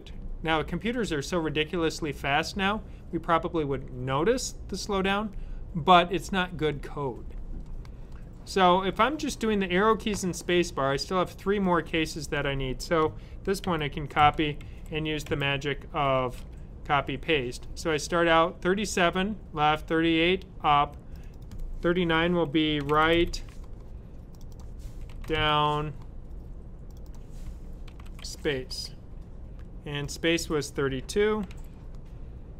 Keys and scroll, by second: 13.5 super+c, 17.4 typing, 18.8 typing, 22.5-23.6 typing, 24.8-25.8 typing, 27.2-28.9 typing, 31.1-31.8 typing.